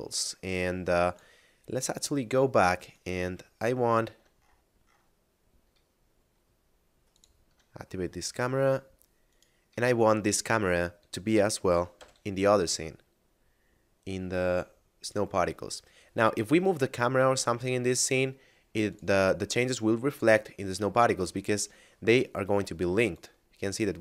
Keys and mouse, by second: 2.9 right click, 3.4 shift+middle click, 5.9 middle click, 7.0 click, 8.1 middle click, 9.2 right click, 9.9 middle click, 15.0 click, 17.6 middle click, 18.8 click, 21.1 middle click, 22.9 shift+click, 23.9 shift+middle click.